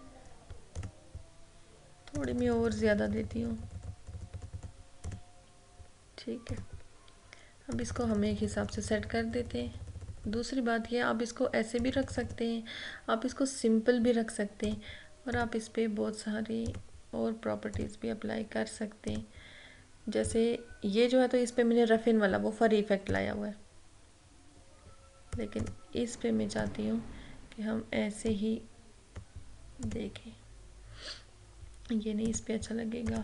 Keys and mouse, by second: 14.6 click, 20.2 click, 23.1 click, 25.7-29.9 drag, 32.3-33.2 drag.